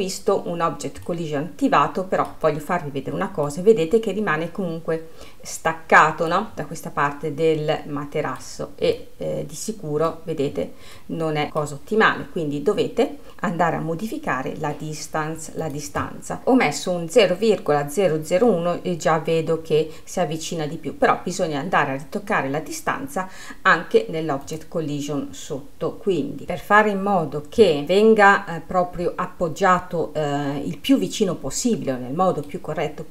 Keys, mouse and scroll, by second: 1.5-3.3 middle drag, 3.3-4.0 scroll up 1, 4.0-6.5 middle drag, 6.5-7.0 scroll up 1, 7.0-9.2 middle drag, 9.2 scroll down 2, 9.5-13.7 middle drag, 16.1 click, 16.4-18.9 middle drag, 19.4 scroll up 2, 20.4-21.1 scroll down 1, 24.9 click, 27.8-30.7 middle drag.